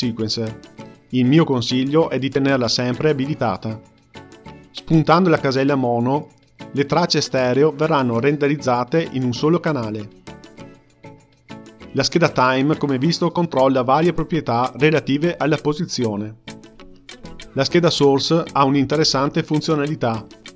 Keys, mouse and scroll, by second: 5.1 click, 12.0-15.8 drag.